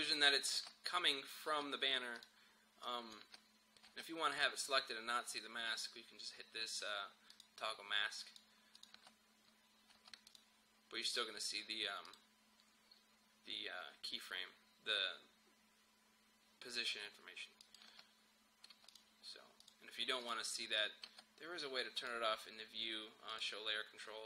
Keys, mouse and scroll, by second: 0.6 space, 2.2 click, 2.2 click, 3.3 space, 4.3 click, 7.3 click, 8.9 space, 10.3 click, 17.7 click, 17.9 space, 20.6 space, 22.0 click.